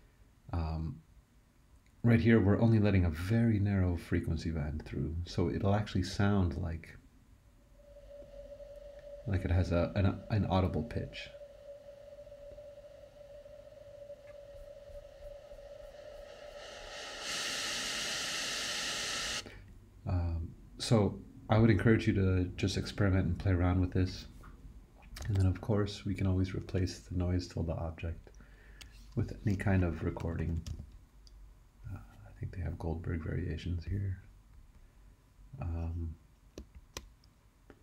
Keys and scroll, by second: 25.2 super+e, 26.7 BackSpace, 29.9-31.2 typing.